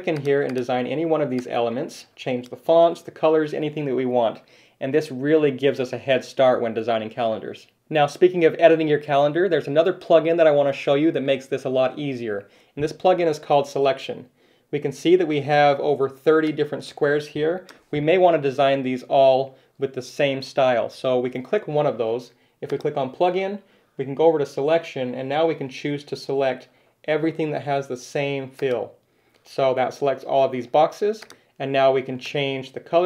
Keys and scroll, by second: 2.7 super+z, 18.7 super+z.